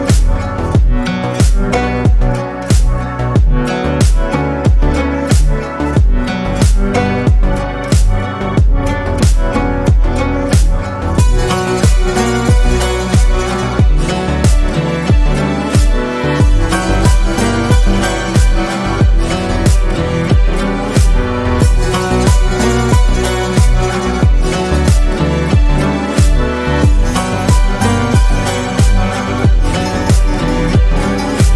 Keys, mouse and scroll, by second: 0.2 click, 0.5 shift+click, 0.7 shift+click, 1.0 shift+click, 1.9 middle click, 2.7 click, 3.7 Tab, 3.9 scroll down 4, 4.2-4.6 middle drag, 4.6 scroll down 1, 4.9-6.7 middle drag, 7.6 scroll up 1, 8.3-8.7 shift+middle drag, 8.7 click, 10.7 click, 12.2 shift+click, 12.9 KP_3, 13.8 click, 14.5-16.4 shift+middle drag, 22.5 KP_7, 23.4-24.0 scroll down 4, 24.0-25.9 scroll up 3, 26.5 s, 28.1 click, 28.7 drag, 29.4 click, 30.2 scroll down 2, 30.4-30.8 shift+middle drag, 30.8-31.3 scroll up 1, 31.3-31.5 shift+middle drag.